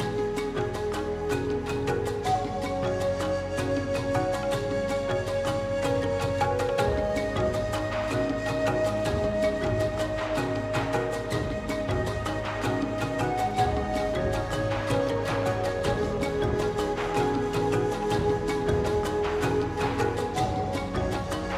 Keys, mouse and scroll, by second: 0.1 Tab, 0.3 r, 3.2 s, 4.3 Tab, 4.6 g, 5.2 g, 6.1 s, 7.1 scroll down 2, 7.3-7.6 scroll up 2, 7.6 shift+d, 8.0 s, 10.4 ctrl+s, 10.6-11.0 scroll down 7, 11.0-11.3 scroll up 1, 11.3 shift+click, 12.0 ctrl+p, 12.7 middle click, 12.8 scroll up 1, 13.0 click, 13.4 KP_1, 13.6 scroll up 1, 13.8 shift+middle click, 14.6 click, 15.0 shift+middle click, 15.3 scroll down 2, 15.4-16.4 shift+middle drag, 16.8-18.3 drag, 19.2 alt+h, 19.9 click, 20.1-20.6 scroll up 3, 20.6 f.